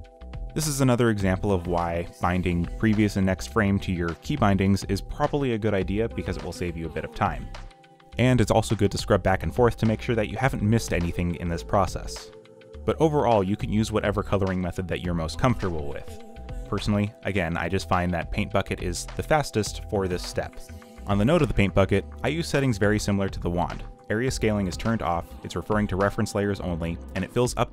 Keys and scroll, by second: 0.8 ,, 3.5-6.4 typing, 8.1-12.6 typing, 14.9 ., 15.1 ., 17.0-25.5 typing, 26.7-27.7 typing.